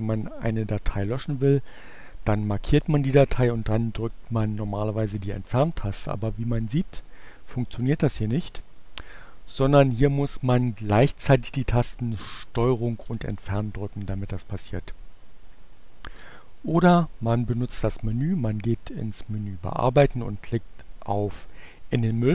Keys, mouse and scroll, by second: 2.3-3.4 drag, 4.6 Delete, 12.8 ctrl+Delete, 15.8 click, 17.7 click.